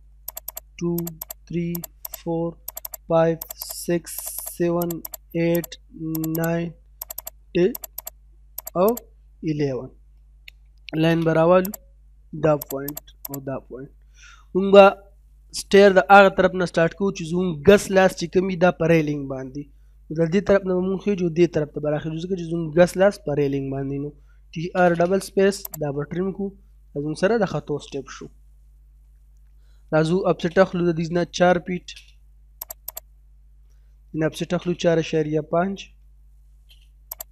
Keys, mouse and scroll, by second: 10.6 l, 10.8 space, 11.7 click, 12.9 right click, 13.3 click, 13.9 middle click, 24.0-24.8 typing, 25.7 click, 26.1-26.4 scroll down 1, 26.6 scroll, 28.2 middle click, 28.9 middle click, 30.0 o, 30.2 space, 31.0 4, 31.7 space, 32.1-32.7 scroll up 1, 32.7 click, 34.2-34.9 typing, 36.4 space, 37.1 click.